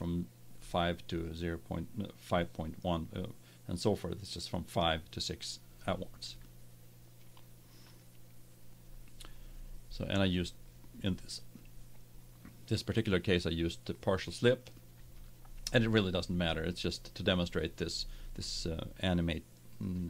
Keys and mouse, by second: 7.9-9.8 drag.